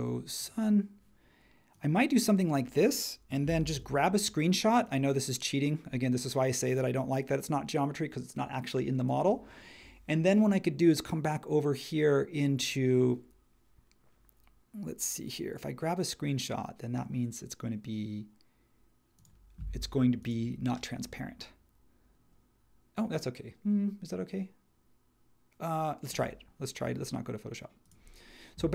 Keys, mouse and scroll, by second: 3.7 shift+super+4.